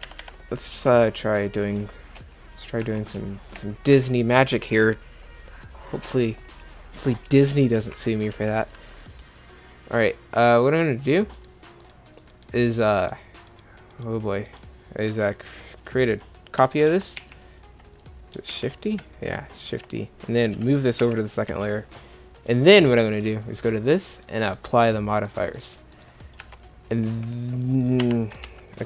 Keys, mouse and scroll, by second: 0.0 Escape, 0.2 Escape, 2.8 Tab, 3.9 Tab, 7.3 3, 7.8 2, 8.3 1, 17.1 ctrl+d, 18.5 shift+d, 20.5 m, 26.4 Tab, 28.0 Escape, 28.4 ctrl+z.